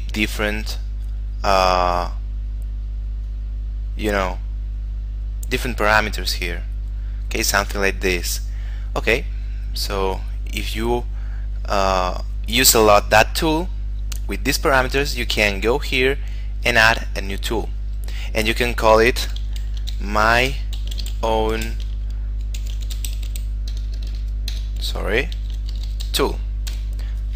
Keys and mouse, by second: 0.5 click, 9.9 click, 17.0 click, 19.9-24.1 typing, 26.0 o, 26.3 l, 27.0 Return.